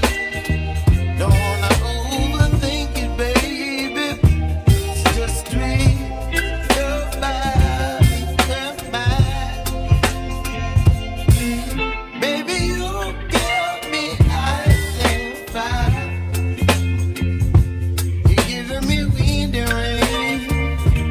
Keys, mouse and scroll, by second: 9.5-10.3 scroll down 1, 10.3-10.9 scroll up 1, 10.9-12.0 scroll down 1, 12.0-13.3 scroll down 1, 14.3-15.8 scroll up 2, 15.8 shift+d, 17.2 p, 18.6 Tab, 19.7-21.1 drag.